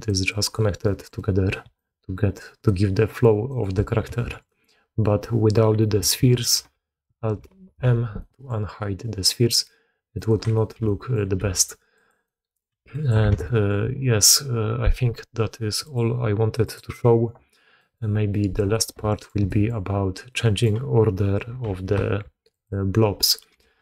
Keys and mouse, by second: 0.0 d, 0.2 click, 0.2-0.7 d, 1.1-1.4 drag, 1.6-2.6 drag, 3.4 drag, 4.0 alt+a, 4.3 click, 7.4 alt+m, 8.1-8.4 drag, 10.1 click, 10.4 shift+drag, 10.7-11.0 drag, 11.3 g, 12.1-12.5 drag, 12.7 g, 13.2 alt+a, 13.3 drag, 15.7 click, 16.5 click, 17.7 click, 19.0 shift+drag, 19.3 drag, 20.3 click, 21.5 shift+a, 23.5-23.8 typing.